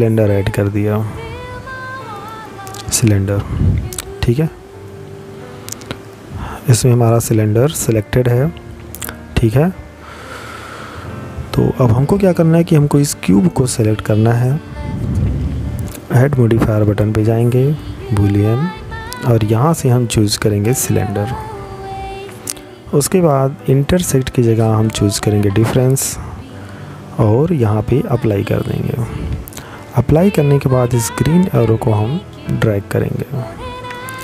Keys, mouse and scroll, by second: 2.6 middle click, 11.2 right click, 13.9 click, 17.3 click, 21.4 click, 25.6 click, 33.4 middle click.